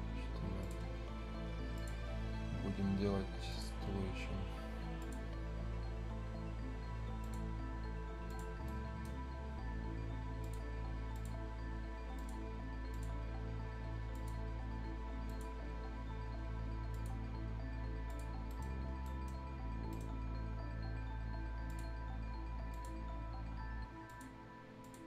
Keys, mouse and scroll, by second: 0.0-0.6 scroll up 1, 0.6 click, 0.8 scroll down 1, 1.0 scroll up 1, 1.7 click, 2.0 scroll down 1, 2.3 scroll up 1, 3.5 click, 3.9 scroll up 1, 5.0 click, 5.4 scroll up 1, 7.2 click, 8.4 scroll down 1, 8.6 right click, 9.1-9.4 scroll down 1, 10.4 scroll up 1, 10.4 click, 11.4-12.1 scroll up 1, 12.1 click, 13.1 scroll down 1, 13.3 scroll up 1, 14.1 click, 14.3 scroll up 1, 15.2 click, 15.5 scroll down 1, 15.7-16.9 scroll up 1, 16.9 click, 18.3 scroll down 1, 18.5 right click, 18.8 scroll down 1, 19.0 right click, 19.4-19.7 scroll up 1, 19.9 right click, 20.0-20.4 scroll up 1, 20.4 scroll down 1, 21.6 click, 21.9-22.7 scroll up 1, 22.7 click, 22.9 scroll down 1, 24.0 click, 25.0 scroll down 1.